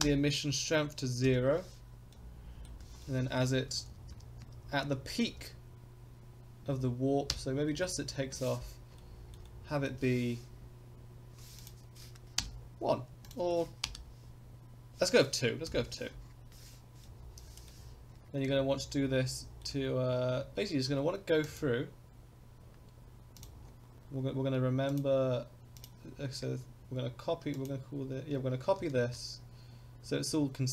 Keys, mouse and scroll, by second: 1.2 i, 2.1 middle click, 2.7 scroll down 2, 3.0 middle click, 3.7 Right, 3.9 Right, 4.1 Right, 4.4 Right, 4.8 Right, 5.3 Right, 6.6 Left, 7.3 Right, 7.7-8.1 middle drag, 8.9-9.3 shift+middle drag, 9.4 middle click, 11.6-16.0 drag, 15.6 i, 17.0-17.7 middle drag, 18.4-19.6 shift+middle drag, 20.1-21.4 scroll up 7, 21.4 click, 21.4 scroll up 1, 22.0 scroll down 1, 22.6-23.4 scroll up 1, 23.4 drag, 23.4 scroll up 1, 23.6-24.5 scroll down 3, 24.9 click.